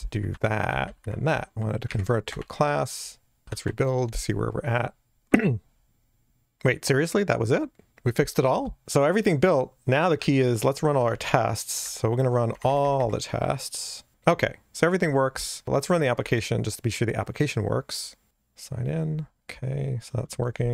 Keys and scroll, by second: 0.4 super+v, 0.7 Delete, 1.0 shift+super+Up, 1.5 alt+Return, 3.6 super+F9, 11.2 ctrl+alt+shift+r, 11.2 ctrl+alt+shift+r.